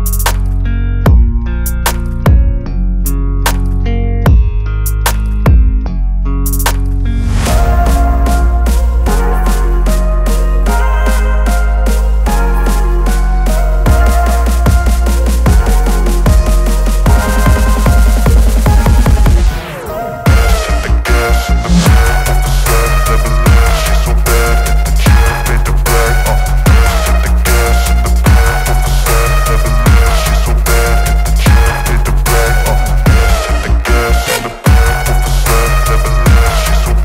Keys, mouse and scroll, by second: 0.6 ctrl+t, 2.3-3.7 drag, 4.6-8.1 alt+drag, 13.2 v, 13.9 ctrl+0, 17.2 ctrl+click, 18.5 ctrl+g, 20.3 click, 21.4-23.2 typing, 23.9 Return, 26.9 click, 30.0 click.